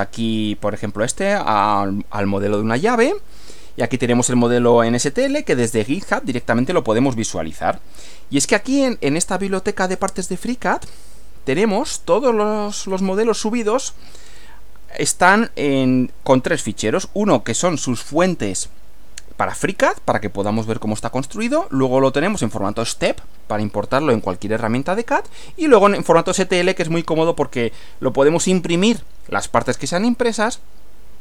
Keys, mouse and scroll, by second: 1.7 click, 4.4 click, 5.9-10.1 drag, 10.9 click, 12.9 click.